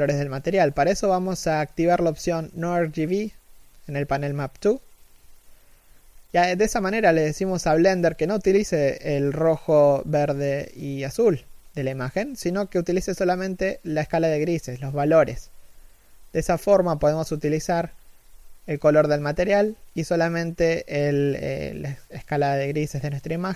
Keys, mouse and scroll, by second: 14.0 shift+middle click.